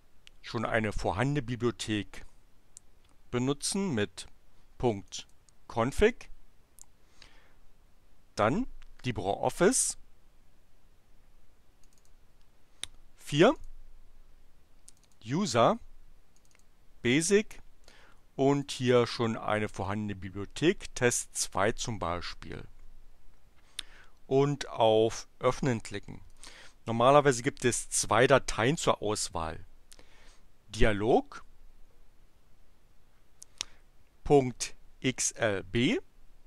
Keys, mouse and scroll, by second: 4.9 click, 11.8 click, 13.3 click, 14.7 click, 16.3 click, 18.5 click, 19.7 click, 26.2 click, 30.7 click.